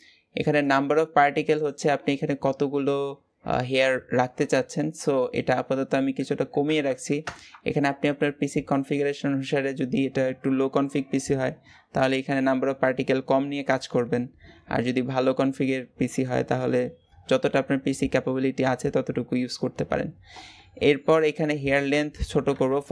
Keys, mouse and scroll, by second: 1.3 click, 7.1 KP_0.